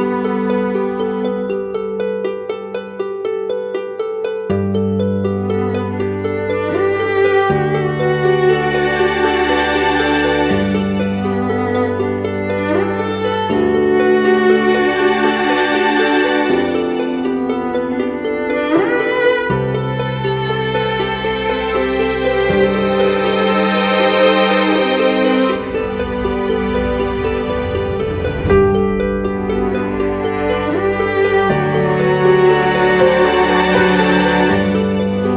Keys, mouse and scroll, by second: 0.3 double click, 7.4 shift+click, 10.2 double click, 23.0 ctrl+t, 23.9 alt+shift+click, 27.2 alt+shift+click, 31.1 Return, 34.1 double click.